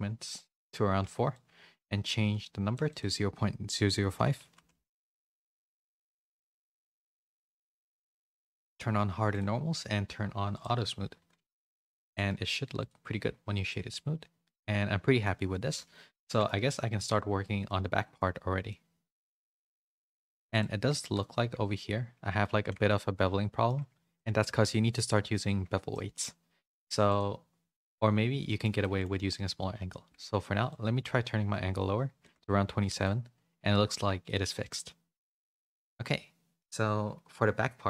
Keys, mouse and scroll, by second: 0.6 click, 1.3-2.7 shift+drag, 2.9-5.8 drag, 4.7 0, 6.7 click, 8.1-9.4 drag, 10.5 click, 11.5 a, 12.0 click, 13.2 a, 13.4 a, 13.7-15.2 middle drag, 15.5 a, 15.7 a, 16.2 middle click, 18.9 middle click, 19.8 middle click, 20.9 shift+middle click, 21.4 Tab, 21.7 middle click, 22.6 Tab, 22.8 middle click, 23.7 Tab, 24.1 middle click, 24.7-25.7 middle drag, 25.9 middle click, 27.0 click, 28.4 middle click, 28.7 shift+middle click, 30.7-32.2 shift+drag, 32.6 a, 32.8 a, 33.0-35.4 middle drag, 35.7 a, 36.0 middle click.